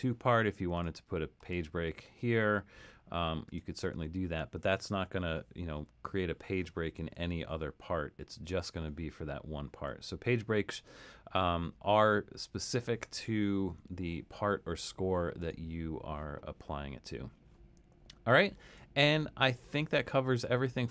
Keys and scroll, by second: 5.8 alt+super+,, 7.0 alt+super+., 7.5 alt+super+., 8.7 alt+super+,, 9.9 alt+super+,.